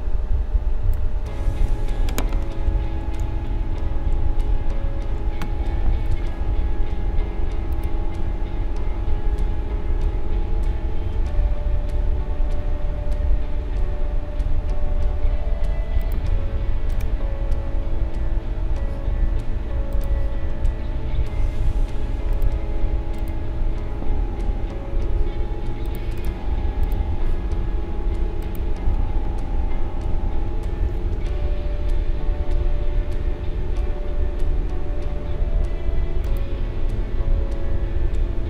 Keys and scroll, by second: 2.2 Up, 3.2 Left, 4.1 Up, 4.7 Down, 5.1 Up.